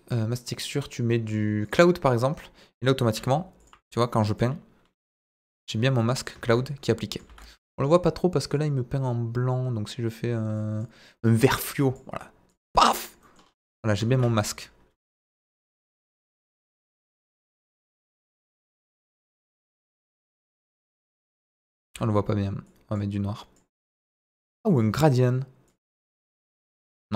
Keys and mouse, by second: 3.2 f, 3.6 f, 4.0 middle click, 4.4 click, 5.9 middle click, 6.4 ctrl+z, 6.6 click, 7.3 ctrl+z, 8.5 click, 10.5 click, 11.3 click, 11.8 click, 12.5 click, 13.2 middle click, 14.1 ctrl+z, 15.0 f, 15.8 click, 16.4 ctrl+z, 17.2 f, 17.9 f, 17.9 f, 18.5 click, 19.7 middle click, 20.4 click, 21.0 ctrl+z, 21.8 ctrl+z, 22.6 click, 23.3 click, 24.0 click, 24.7 click, 25.6 click, 26.8 ctrl+z.